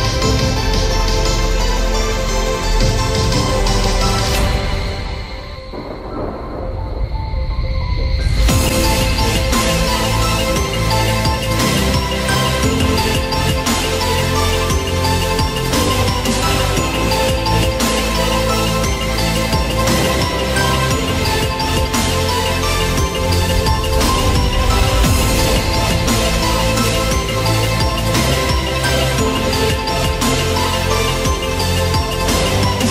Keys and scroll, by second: 3.1 ctrl+0.